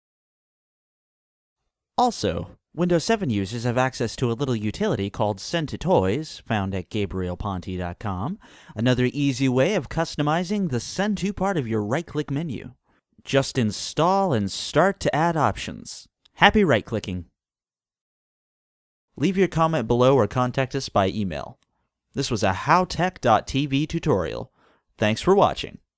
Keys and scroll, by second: 4.1-6.1 typing, 6.4 Return.